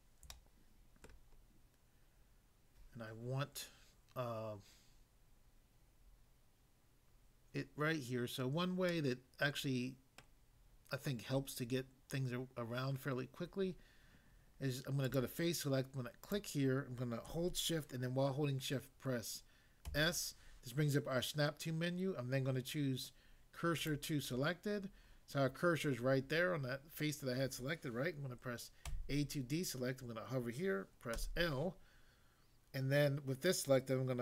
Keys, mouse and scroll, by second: 0.3 shift+middle click, 1.1 shift+middle click, 1.3 scroll up 1, 8.9 middle click, 10.2 middle click, 15.0 click, 16.3 click, 19.8 s, 23.7 click, 28.9 a, 31.2 l.